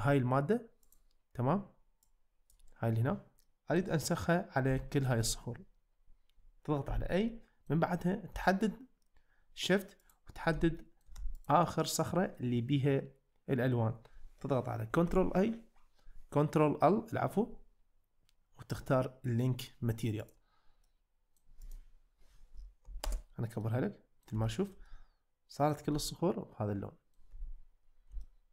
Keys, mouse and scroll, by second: 2.2 click, 3.5-3.8 middle drag, 4.8 shift+middle drag, 5.2 middle click, 7.3-7.7 middle drag, 10.8 shift+middle drag, 11.8-12.4 middle drag, 13.0-13.7 middle drag, 15.1 ctrl+l, 20.9-21.4 middle drag, 23.1 ctrl+alt+space, 23.6-24.2 middle drag, 24.5 shift+middle drag, 24.9-25.7 middle drag, 25.9-27.2 middle drag, 28.2-28.5 shift+middle drag.